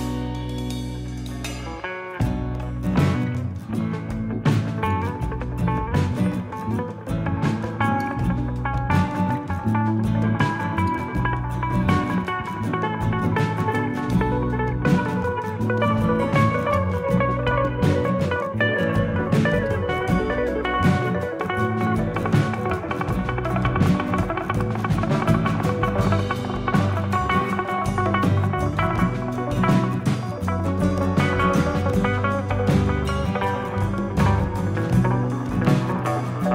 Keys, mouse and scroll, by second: 0.8 s, 3.1-3.9 scroll up 9, 3.9 s, 5.9 middle click, 8.0 click, 9.1 click, 12.6 KP_3, 13.9 click, 16.9 click, 19.2 ctrl+KP_1, 19.9 scroll up 3, 20.6 g, 22.8 scroll up 2, 23.2 shift+middle click, 23.7 s, 26.4 shift+middle click, 27.1 click, 27.7 shift+click, 29.5 click, 30.1 e, 31.0 click, 32.4 s, 34.5-35.0 scroll down 5, 35.1 shift+middle click, 35.8 middle click.